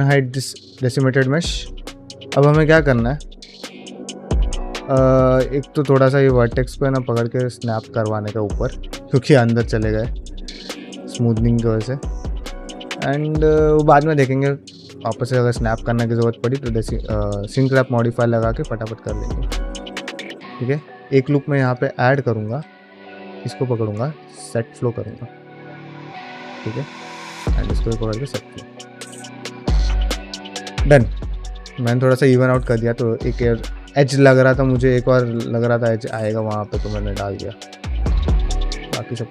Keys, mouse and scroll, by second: 0.0 click, 0.7 shift+middle click, 1.0 ctrl+middle click, 1.6 middle click, 1.9 shift+middle click, 2.7 middle click, 3.7 ctrl+middle click, 4.0 shift+middle click, 4.8 middle click, 5.3 click, 6.7 g, 8.0 middle click, 8.5 shift+middle click, 9.3-10.4 middle drag, 10.8 ctrl+middle click, 11.0-13.9 middle drag, 14.1 ctrl+middle click, 14.4 shift+middle click, 14.7 ctrl+middle click, 15.0 middle click, 15.4 shift+middle click, 15.6 ctrl+middle click, 15.8 middle click, 16.1 shift+middle click, 16.7 click, 16.9 g, 18.0 click, 18.1 g, 19.0 middle click, 19.5 ctrl+middle click, 19.8 middle click, 20.2 ctrl+r, 22.3 q, 23.2 alt+click, 25.4 scroll down 1, 25.6 middle click, 26.2 middle click, 27.5 alt+click, 27.8 q, 28.5 middle click, 28.8 click, 29.1 middle click, 30.1 middle click, 31.1 scroll down 1, 31.4 middle click, 32.2 shift+middle click, 32.5 middle click, 33.1 middle click, 33.6 middle click, 34.0 middle click, 35.0 shift+middle click, 35.7 alt+click, 36.1 q, 37.0 alt+click, 37.4 q, 38.0 alt+click, 38.3 q, 38.7 scroll down 1, 38.8 middle click, 39.1 middle click.